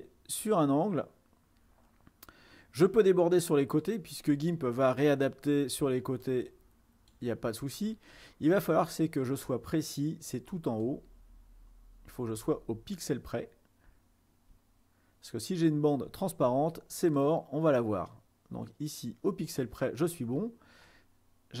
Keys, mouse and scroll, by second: 6.4-8.2 drag, 8.5 scroll up 2, 10.9-12.5 drag, 12.8 ctrl+middle click, 12.8-14.0 ctrl+scroll up 6, 13.4 ctrl+middle click, 15.4-17.2 ctrl+scroll down 2, 17.3-20.5 drag, 21.1-21.6 middle drag.